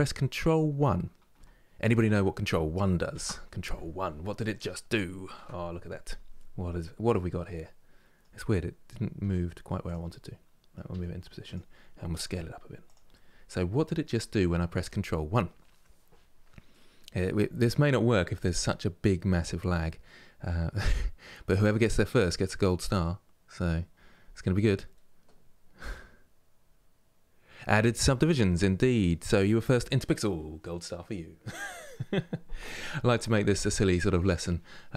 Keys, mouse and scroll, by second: 2.8 ctrl+1, 4.0 scroll up 2, 5.0 KP_Decimal, 5.5 scroll down 2, 6.4-6.8 scroll down 8, 6.8-8.9 middle drag, 8.9 g, 9.8 middle click, 10.6 g, 13.0 scroll down 2, 13.9-34.9 middle drag.